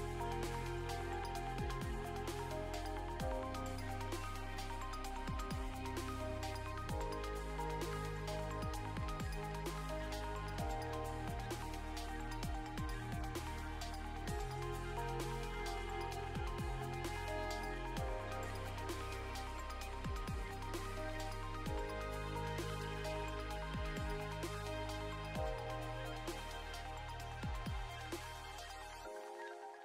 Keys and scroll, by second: 0.8 Escape, 1.6 Up, 2.6 Left, 3.0 BackSpace, 4.9 Escape, 5.4 ctrl+s, 15.0 ctrl+s, 27.4 Left, 27.6 Left, 27.7 Left, 27.8 Left, 27.9 Left, 28.3 Escape.